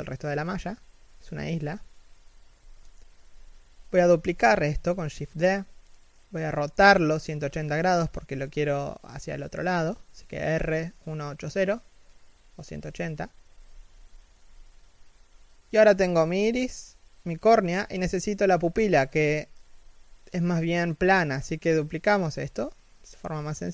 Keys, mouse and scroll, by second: 0.4 g, 3.0 shift+d, 4.6 z, 4.8 middle click, 5.4 KP_3, 5.9 z, 10.1 r, 12.8 middle click, 15.3 KP_1, 15.6 z, 16.1 KP_3, 16.9 shift+middle click, 17.4 g, 21.4 shift+d, 22.7 s.